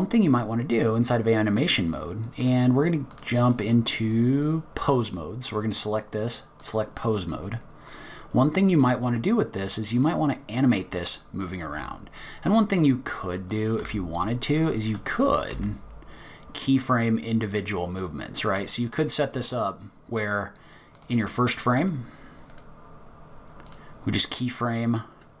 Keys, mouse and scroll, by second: 2.4 click, 3.5 click, 4.0-5.0 scroll up 2, 5.9 click, 7.9 click, 11.6 g, 13.8 r, 15.5 g, 22.5 right click.